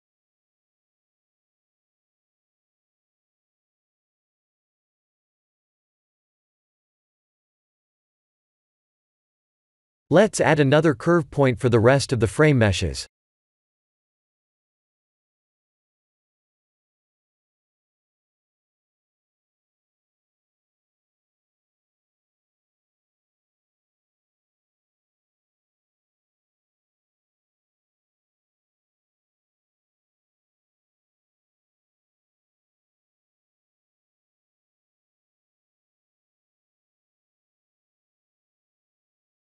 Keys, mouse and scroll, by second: 0.5 Tab, 0.9 middle click, 2.0 middle click, 2.2 Tab, 2.5 middle click, 3.7 KP_1, 4.0 KP_7, 5.1 shift+middle click, 6.6 scroll down 2, 7.1 shift+middle click, 10.4 shift+a, 17.2 click, 21.0-24.0 scroll down 1, 25.0 g, 29.6 scroll up 1, 30.2 scroll up 2, 30.4 shift+middle click, 30.9 scroll up 1, 33.0-33.4 scroll up 3, 33.9 e.